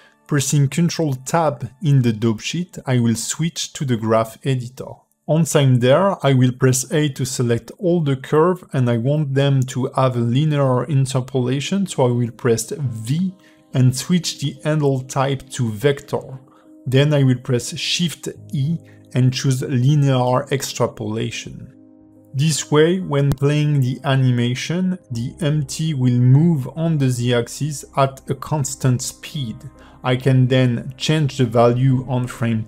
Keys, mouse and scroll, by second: 7.5 ctrl+Tab, 8.5 shift+middle click, 10.3 click, 11.7 scroll up 3, 12.0 a, 12.3 KP_Decimal, 13.3 a, 29.2 click, 30.2 g.